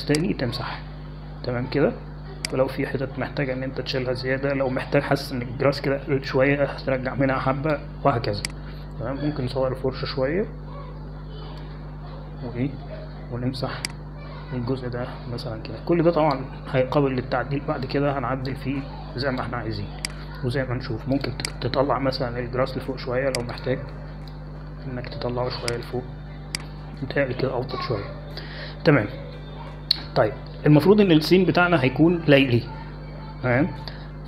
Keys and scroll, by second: 1.8 x, 7.4 x, 11.2 [, 11.2 [, 11.4 [, 13.2 x.